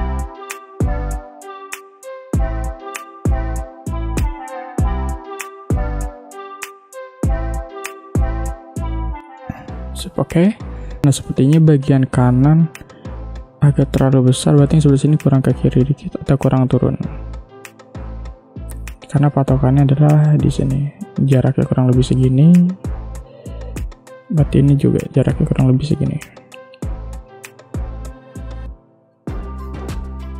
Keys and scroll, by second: 3.4 a, 4.5-7.4 typing, 8.8 v, 9.0 space, 11.0 space, 19.5 m, 23.3 v.